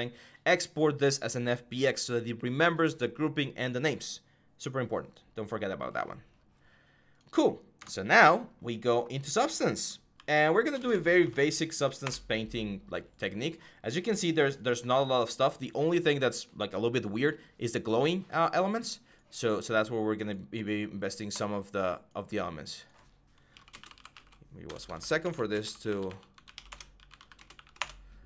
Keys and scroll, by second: 11.0-12.6 typing, 23.0-27.9 typing, 26.5 Return.